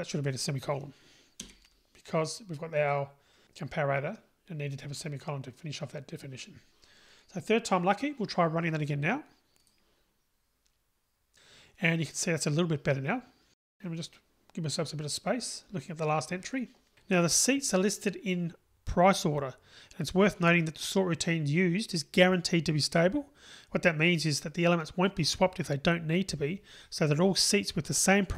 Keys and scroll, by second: 9.9 ctrl+r.